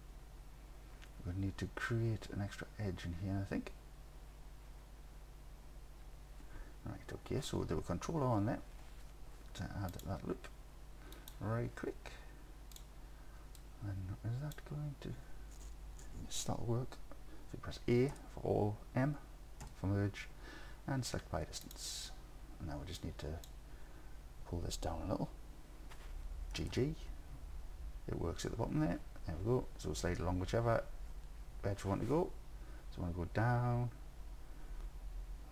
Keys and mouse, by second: 7.4 ctrl+r, 11.2 click, 12.8 click, 13.6 click, 18.2 a, 19.7 m, 23.0 click, 26.6 g, 26.8 g.